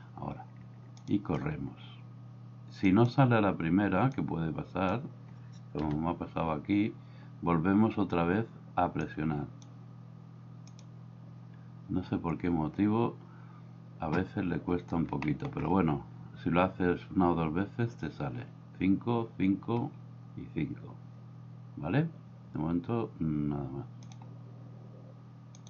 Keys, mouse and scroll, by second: 1.0 click, 3.0 click, 4.2 click, 5.8 KP_1, 9.3 click, 15.2-15.5 shift+middle drag.